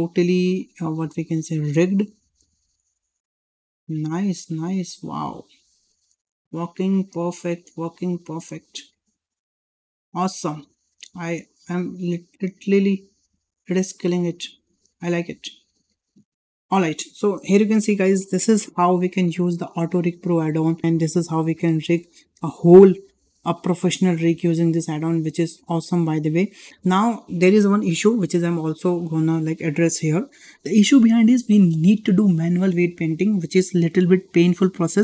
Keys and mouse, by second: 1.8 middle click, 2.9 g, 5.5-5.9 middle drag, 7.5 middle drag, 8.2 click, 8.6 g, 10.6 middle drag, 11.4 middle drag, 13.1 click, 13.3 g, 15.0 click, 15.2 g, 18.1 shift+middle click, 18.9 shift+middle drag, 19.4 middle drag, 19.8 shift+middle drag, 20.6 shift+middle drag, 22.0 shift+middle click, 22.4-22.8 middle drag, 23.0 shift+middle drag, 24.3 shift+middle drag, 24.7-25.6 middle drag, 25.9-26.7 shift+middle drag.